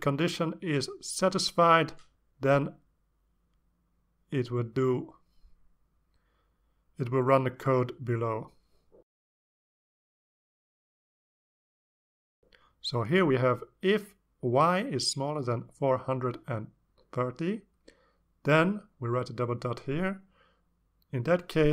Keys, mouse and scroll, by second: 5.1 click, 7.4 click, 11.3-12.4 drag, 13.1 click, 15.2 click, 16.7 4, 17.3 click, 18.7-21.7 typing, 19.0 Return.